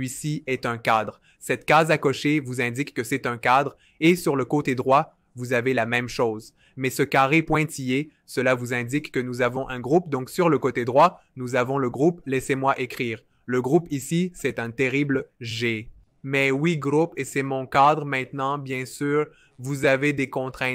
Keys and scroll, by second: 15.1 super+z, 19.9 v.